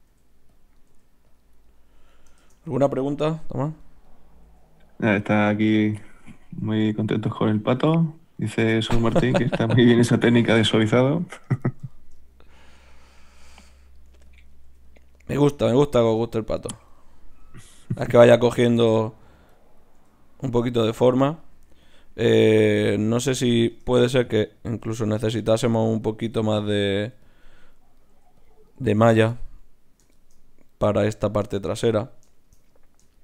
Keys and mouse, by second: 0.1 g, 0.9 g, 2.4 shift+Tab, 3.3 g, 4.8 g, 5.2 g, 5.8 g, 6.6 g, 7.4 click, 7.6 g, 9.2 g, 9.8-10.9 drag, 9.9 g, 10.2 right click, 11.0 g, 11.6 click, 11.6-13.9 right drag, 12.7 g, 13.5 g, 14.1 g, 14.6 g, 15.8 ctrl+z, 16.0 ctrl+z, 20.0 g, 20.8 g, 21.5 g, 22.9 g, 24.7 g, 25.7 g, 27.0 g, 28.1 g, 28.4-30.2 drag, 28.4-30.2 right drag, 28.8 g, 30.2-33.2 middle drag.